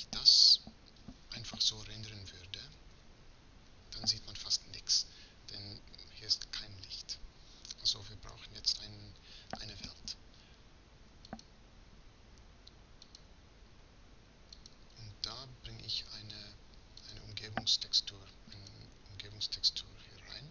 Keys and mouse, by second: 2.8 shift+z.